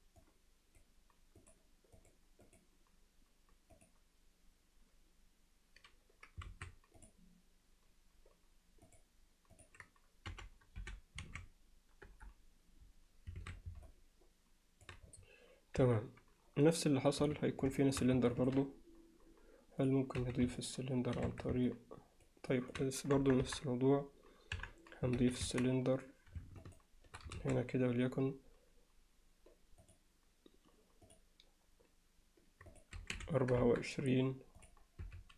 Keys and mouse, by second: 0.2 click, 2.1 click, 2.5-4.0 drag, 6.5 ctrl+a, 8.9 click, 9.5-13.1 drag, 13.4 alt+a, 13.9-14.9 alt+middle drag, 15.8 KP_1, 17.2 z, 17.8 alt+shift+middle drag, 18.4 ctrl+alt+middle click, 19.8 click, 20.2 z, 20.6-21.2 alt+middle drag, 21.3 Tab, 21.7 alt+middle click, 22.5 alt+middle click, 23.2 KP_1, 23.5 KP_3, 24.6 KP_1, 25.2 z, 25.8 Tab, 27.4 shift+a, 31.1 click, 32.7-34.0 drag, 34.6 click, 35.0 s.